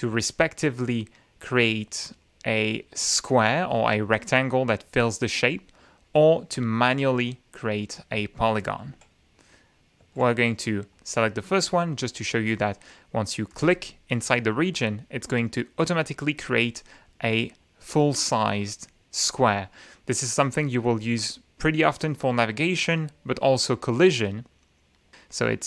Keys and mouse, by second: 1.6 click, 2.5 click, 5.4 click, 6.3 click, 8.8 shift+F9, 10.0 shift+F9, 10.9 click, 13.5 click.